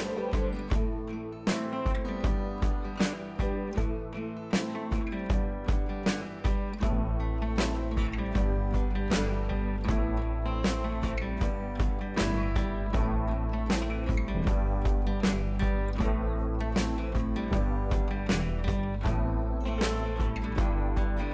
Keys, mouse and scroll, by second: 0.7 click, 1.2 scroll up 1, 1.2 ], 1.5 click, 2.5 scroll up 1, 3.0 click, 3.7 scroll down 1, 3.9 b, 4.8-7.0 drag, 8.4 scroll down 1, 8.6 ], 8.8 ], 9.0 ], 9.5 click, 15.6 click, 16.2 ctrl+z, 18.6-18.9 scroll up 1, 18.9 click, 20.8 v, 21.0-21.3 drag.